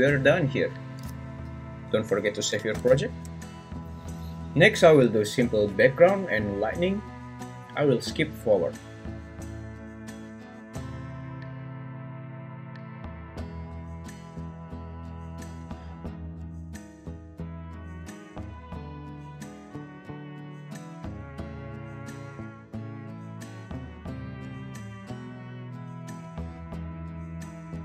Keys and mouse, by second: 0.0 Tab, 2.8 ctrl+s, 9.9-11.8 typing, 11.7 Escape, 12.0 ctrl+p, 12.4 right drag, 12.9 m, 13.7 alt+d, 13.7 Escape, 14.1-17.6 typing, 14.8 Return, 18.6 g, 18.6 y, 18.9 s, 19.1 ctrl+b, 19.9-22.1 typing, 21.3 Escape, 22.5 ctrl+z, 22.8 alt+r, 23.4-27.5 typing, 23.9 Escape, 23.9 ctrl+z, 24.9 Escape, 25.3 click.